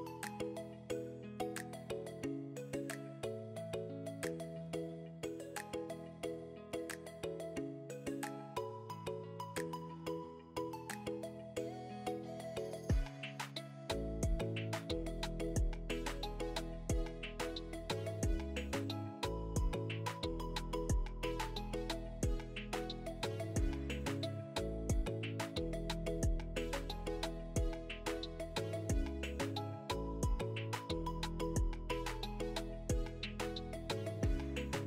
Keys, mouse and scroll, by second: 1.9 click, 2.7 g, 3.8 click, 4.0 g, 5.1 click, 5.8 e, 7.9 click, 8.9 g, 10.4 click, 10.9 g, 11.4 click, 11.6 g, 12.7 click, 13.9 e, 15.4 click, 16.3 g, 24.1 click, 24.2 g, 25.0 click, 25.1 g, 30.7 click, 31.3 e, 32.9 click, 33.4 g.